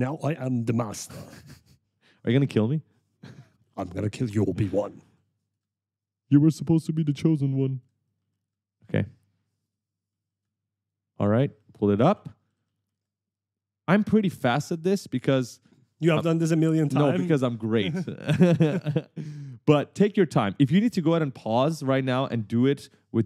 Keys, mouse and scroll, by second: 0.2 right click, 1.4 shift+click, 3.7 right click, 6.1 shift+click, 8.2 right click, 10.2 right click, 11.0 shift+click, 12.3 s, 12.8 w, 14.1 shift+click, 15.3 right click, 18.0 shift+click, 19.4 right click.